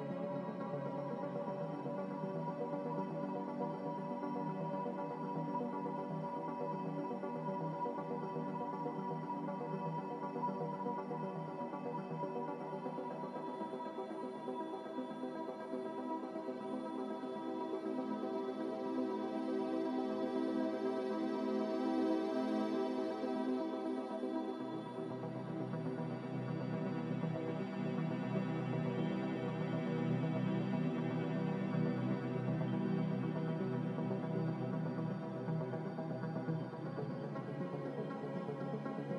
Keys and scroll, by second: 27.6 Escape, 29.0-33.9 typing, 36.8 z, 38.1 Delete.